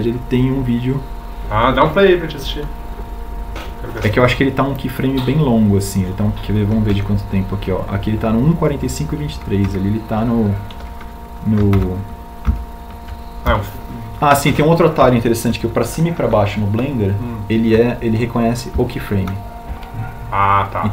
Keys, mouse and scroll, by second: 17.1 Down.